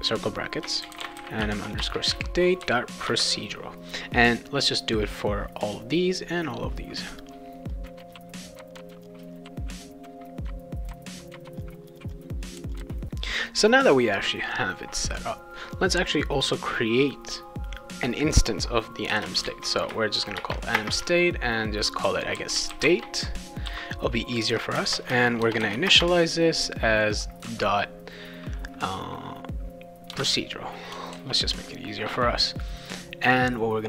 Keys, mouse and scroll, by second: 0.6-2.6 typing, 3.1 Return, 7.7 click, 7.9 click, 8.2 click, 8.5 click, 8.7 click, 8.8 click, 9.3 click, 9.6 r, 9.9 click, 10.1 click, 10.3 click, 10.4 ctrl+v, 10.8 click, 11.1 click, 11.3 click, 11.3 ctrl+v, 11.4 click, 11.7-12.7 typing, 11.8 click, 12.1 click, 12.4 click, 12.7 click, 15.7 click, 16.1 click, 19.1 Return, 19.4 shift+a, 20.3 Return, 20.8 space, 21.8-23.6 typing, 24.8-25.9 typing, 30.1 Return, 31.1 ctrl+s, 33.2 click.